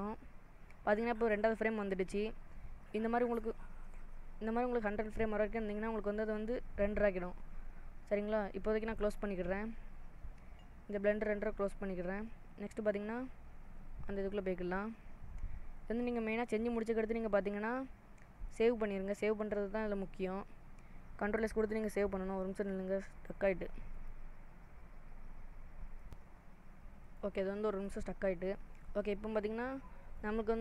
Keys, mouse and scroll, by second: 29.7 click.